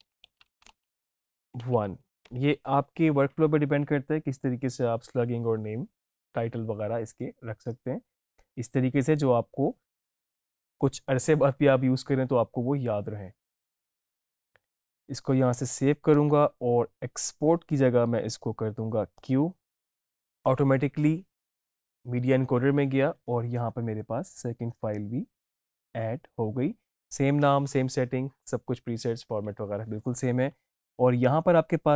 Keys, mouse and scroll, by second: 0.0-2.7 typing, 8.3-11.4 drag, 15.5 click, 19.1 click.